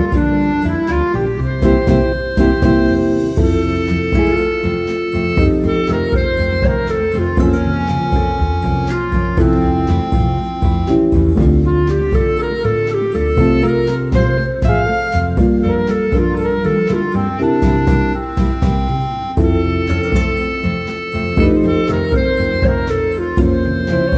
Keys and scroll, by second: 4.5 Tab, 6.4 ctrl+c, 6.6 ctrl+v, 7.6 ctrl+z, 8.8 ctrl+c, 9.3 ctrl+v, 20.2 Tab.